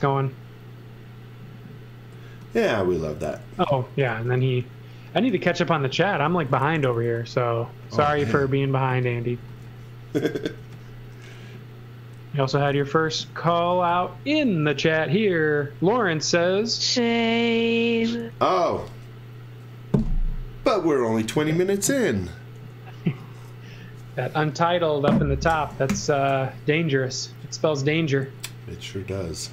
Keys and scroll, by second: 2.1 x, 4.1 v, 5.2-10.6 typing, 11.6-13.7 typing, 25.8 super+s.